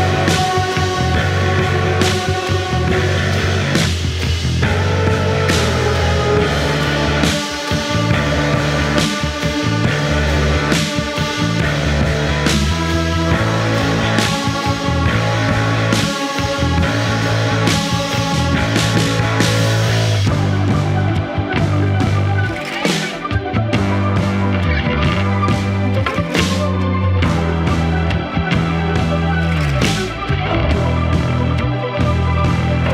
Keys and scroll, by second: 4.7 4, 6.4 3, 15.6 4, 21.2 2, 23.3 F3, 26.4 Delete, 27.3 Delete, 28.4 f, 29.2 4, 32.0 F1, 32.1 F2.